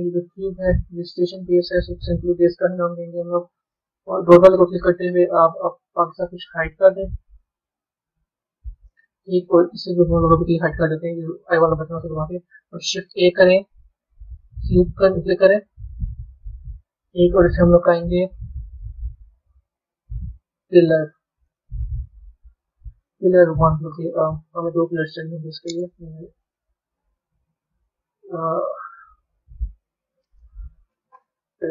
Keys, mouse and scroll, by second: 0.2 click, 0.8 click, 3.9 click, 6.8 click, 8.1-8.6 scroll up 4, 8.6-10.1 middle drag, 10.1 click, 12.6 shift+a, 16.8-18.0 scroll up 9, 18.5 click, 20.1 l, 22.8 click, 23.3 click, 23.7-26.7 drag, 27.7 click, 29.5 l.